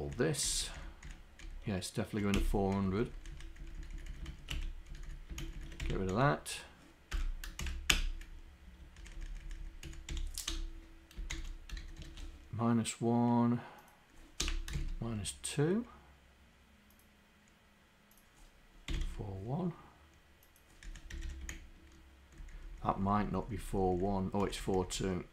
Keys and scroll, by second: 0.4 shift+Down, 0.8 shift+Down, 2.4 Delete, 2.8 Up, 3.4 Up, 3.6 Down, 3.8 Down, 4.4 shift+Down, 4.6 Delete, 5.5 shift+Down, 5.8 Delete, 6.2 Down, 7.2 Return, 7.6 shift+Insert, 8.0 Return, 9.1 Up, 9.5 Up, 11.8 shift+d, 14.4 BackSpace, 14.8 shift+w, 19.0 1, 20.9 Up, 21.2 Home, 21.5 shift+Down, 23.6 shift+Down, 23.9 shift+Down, 24.4 shift+Down, 25.0 shift+Down.